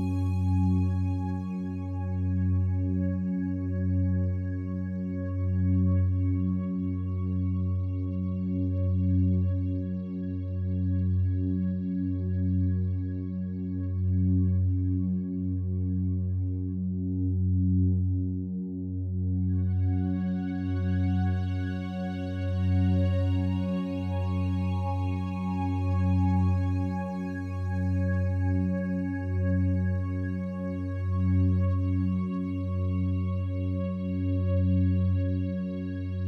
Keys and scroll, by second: 21.6 ctrl+d.